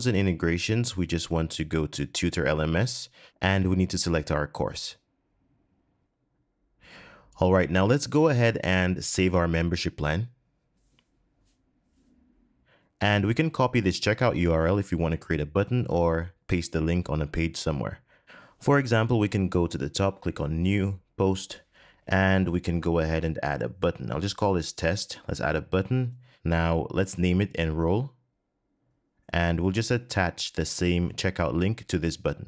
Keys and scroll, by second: 14.9 super+c, 31.4 super+v.